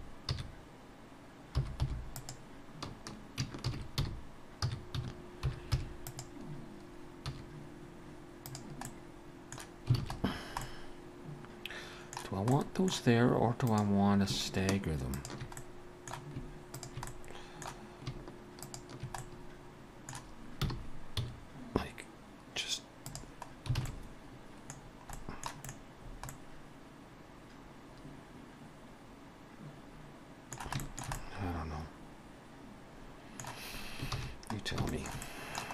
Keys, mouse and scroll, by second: 3.7 shift+d, 8.7 z, 8.9 middle click, 10.0 alt+a, 10.3-10.6 scroll down 3, 10.6 middle click, 12.5 middle click, 13.7 click, 15.1 shift+click, 15.6 middle click, 16.8 shift+click, 17.1 middle click, 18.7 shift+click, 19.2 middle click, 20.7 r, 23.5 scroll down 3, 23.8 alt+a, 23.9 middle click, 24.8-25.5 scroll down 2, 25.2 middle click, 25.7 middle click, 25.7-26.4 scroll up 5, 26.3 middle click, 30.8 shift+middle click, 31.2 middle click, 34.2 ctrl+s, 34.6 scroll down 3, 34.9 shift+middle click, 35.2 middle click.